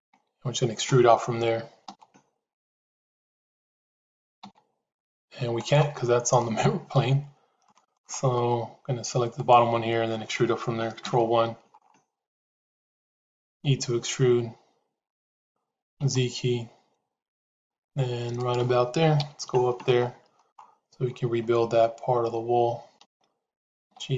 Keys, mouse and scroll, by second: 1.9 e, 6.3 middle click, 7.6 shift+middle click, 10.9 ctrl+KP_1, 13.5 e, 19.1 KP_Decimal, 22.9 g.